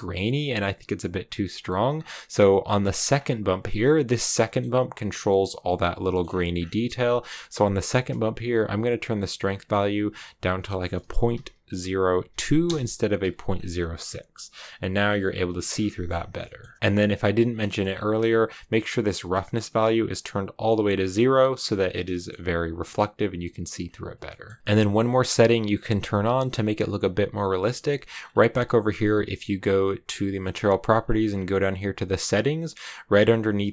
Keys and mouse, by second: 3.0 click, 3.8 middle click, 4.4 middle click, 5.9 middle click, 9.4-13.2 drag, 16.3 shift+middle click, 17.6 middle click, 18.7-20.6 drag, 22.0 shift+click, 24.2 click.